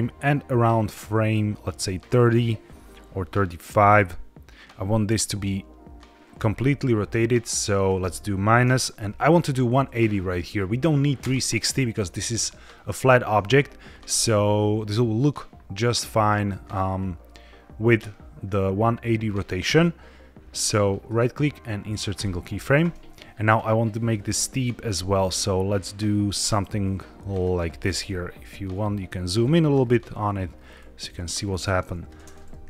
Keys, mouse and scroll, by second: 7.7-11.1 drag, 21.0-22.1 right drag, 23.3 click, 24.3 click, 27.5-27.9 scroll up 1, 27.9-29.2 ctrl+middle drag, 29.3 middle click, 29.8-31.0 ctrl+scroll down 9, 31.6-32.0 drag, 32.1 space.